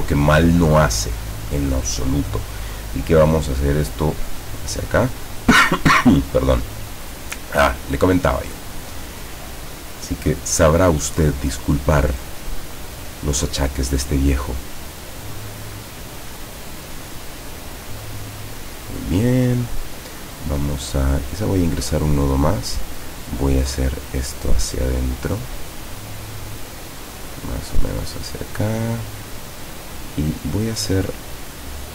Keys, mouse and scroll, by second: 2.6-5.3 drag, 9.2-12.0 drag, 12.6-14.7 drag, 16.5-19.5 drag, 21.8 click, 23.3-25.4 drag, 26.1-28.1 drag, 29.5 click, 31.4-31.9 drag.